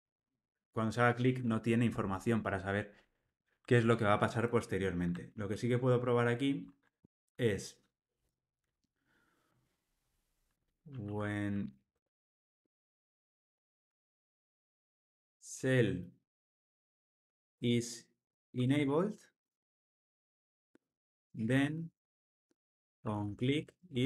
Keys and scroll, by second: 5.5 super+p.